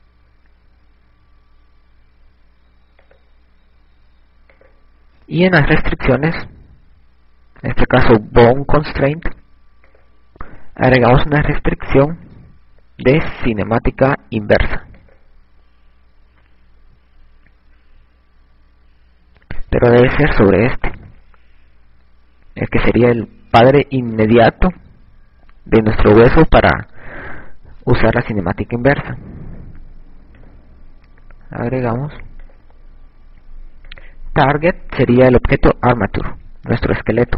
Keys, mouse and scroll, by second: 3.9 click, 5.6 click, 9.9 click, 18.2 ctrl+z, 22.1 right click, 31.6 click, 35.0 click.